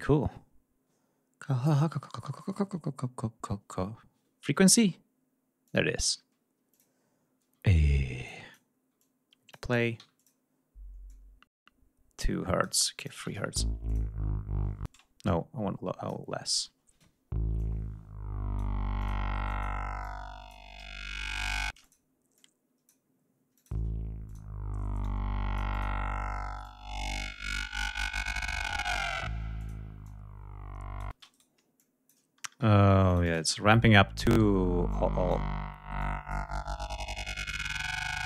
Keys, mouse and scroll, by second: 5.7 click, 6.7 click, 8.3 click, 9.0 click, 10.0 d, 10.2 click, 11.1-12.7 drag, 12.9 click, 13.1 space, 13.8 click, 14.8 space, 15.2 click, 16.4 click, 16.6 space, 17.5-18.7 drag, 18.9 click, 19.4 click, 19.9 click, 21.1 shift+right click, 21.7 shift+space, 21.7 shift+click, 22.3 shift+click, 23.5 click, 23.7 space, 24.2 click, 24.9 click, 26.6-28.1 drag, 28.3 ctrl+scroll up 2, 29.5 click, 30.0 click, 31.0 space, 31.2 shift+right click, 31.7 shift+click, 33.0 click, 33.3 space, 34.1 click, 34.8 click, 35.9 click, 37.2 click.